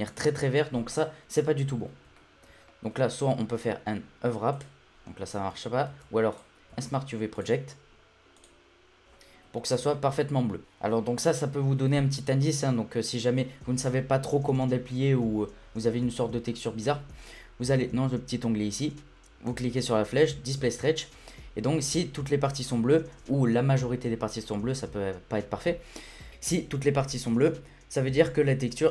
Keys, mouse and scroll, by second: 2.2-3.5 shift+middle drag, 3.5 u, 5.6 i, 6.7 u, 9.9 shift+middle click, 10.6 Tab, 12.8-15.8 scroll down 1, 15.9-17.8 middle drag, 17.8-19.8 scroll down 1, 19.8-22.2 drag, 22.6-25.7 scroll up 1.